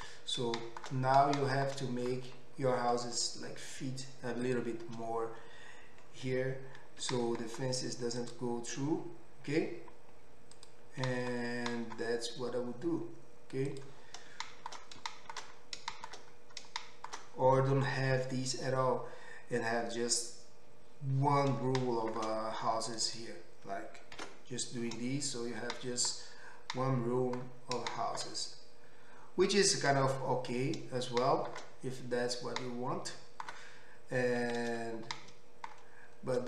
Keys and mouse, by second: 4.6-10.5 middle drag, 7.0 g, 10.5 click, 10.7-22.9 middle drag, 11.0 g, 22.9 click, 23.0 middle click, 23.1 click, 23.2-33.2 middle drag, 24.2 ctrl+x, 34.7 ctrl+z.